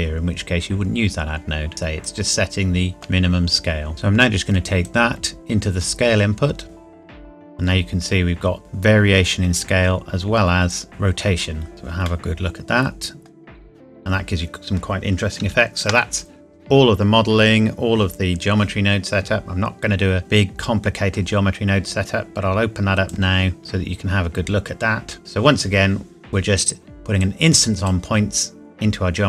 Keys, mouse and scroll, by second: 0.0 shift+scroll down 2, 1.7 click, 2.9 shift+middle click, 4.8 click, 7.1 scroll up 1, 8.5 scroll down 1, 10.7 click, 10.9 scroll up 1, 12.0 middle click, 15.5 ctrl+s, 20.3 click, 24.0 scroll up 1, 27.2 click.